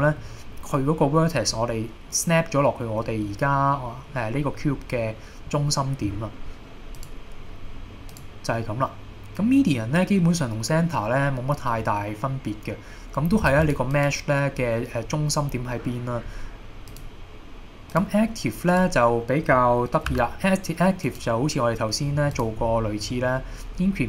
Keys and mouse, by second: 3.8 middle click, 7.0 click, 8.2-13.6 drag, 13.7 click, 16.9-18.3 drag, 20.2 g, 21.1 click, 21.9-22.3 middle drag, 22.4 click.